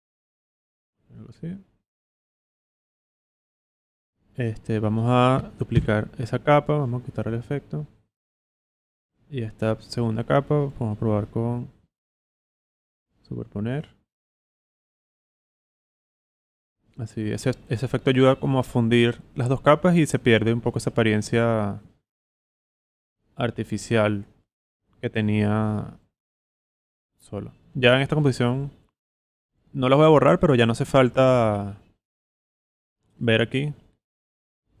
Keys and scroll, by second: 5.7 super+d.